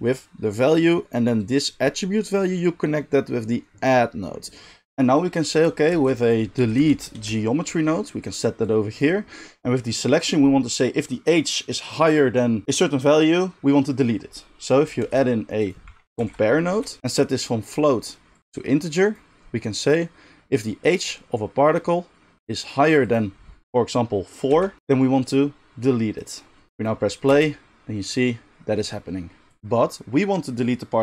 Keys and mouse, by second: 4.8-8.6 middle drag, 5.9 shift+a, 8.6-17.0 drag, 15.0 shift+a, 17.0-18.3 middle drag, 18.3-31.0 drag, 27.3 space.